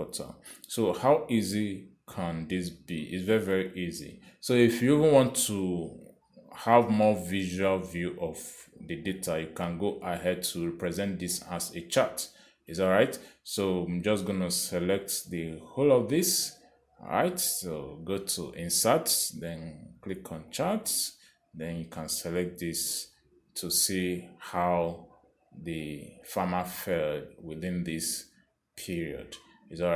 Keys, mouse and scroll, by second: 0.3 Return, 3.9 click, 17.3 click, 20.0 click, 21.8 click, 25.2 click, 27.5 click.